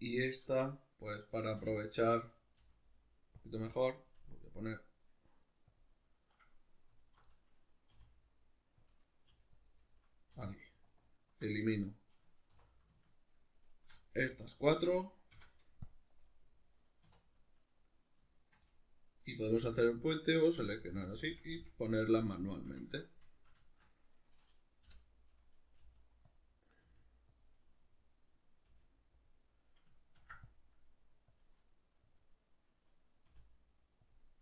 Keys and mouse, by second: 1.6 l, 2.6 g, 3.5 click, 3.5-5.8 middle drag, 4.2 g, 5.8 click, 5.8-7.0 middle drag, 7.0 alt+right click, 7.3-8.9 middle drag, 7.9 r, 8.9 click, 9.2 g, 9.6 click, 9.7-10.9 middle drag, 10.3 2, 10.9 alt+right click, 11.8 right click, 12.5 3, 12.6 right click, 13.0 shift+right click, 13.3 shift+right click, 13.7 shift+right click, 14.0 middle click, 14.6 alt+shift+right click, 15.3 x, 16.3-17.7 middle drag, 17.1 2, 17.7 right click, 18.3 shift+right click, 18.7-20.1 middle drag, 19.5 f, 20.1 right click, 20.5 f, 21.9-24.2 middle drag, 24.2 right click, 24.9 l, 25.0 middle click, 25.8 g, 26.4 click, 26.5 middle click, 26.8 r, 27.4 click, 27.5-28.7 middle drag, 28.7 g, 29.3 click, 29.4-31.4 middle drag, 30.2 ctrl+r, 31.4 click, 32.0-34.1 middle drag, 33.3 r, 34.1 click.